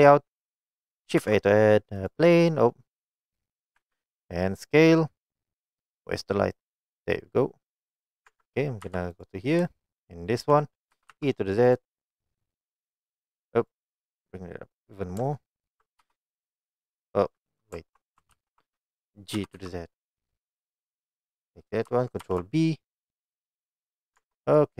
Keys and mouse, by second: 0.0 click, 1.2 shift+a, 3.8 s, 4.7 click, 6.6 click, 7.2-7.7 middle drag, 8.3 Tab, 8.9 2, 9.2 click, 10.1 shift+click, 11.0 e, 11.2 z, 11.7 click, 12.4 click, 13.9 right click, 16.1 g, 16.6 click, 17.7 ctrl+right click, 18.4 ctrl+z, 19.4 g, 19.6 z, 20.2 click, 20.9 click, 22.3 ctrl+b, 24.1 click, 24.2 Tab.